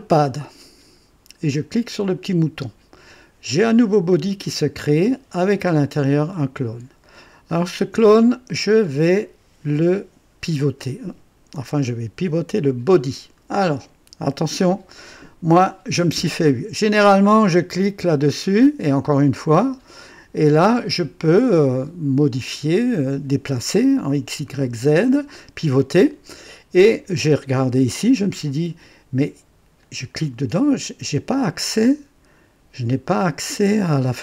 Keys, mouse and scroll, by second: 2.2 click, 4.7 click, 7.4-9.1 drag, 12.6 click, 18.0 click, 19.3 click, 29.8 click.